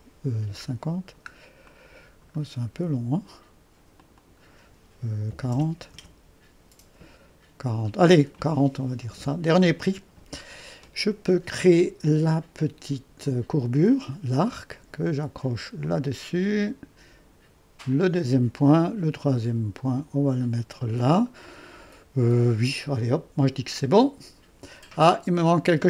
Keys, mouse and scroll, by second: 4.0-5.3 drag, 5.1-6.9 typing, 5.9 Return, 13.3-18.6 drag, 19.8 click.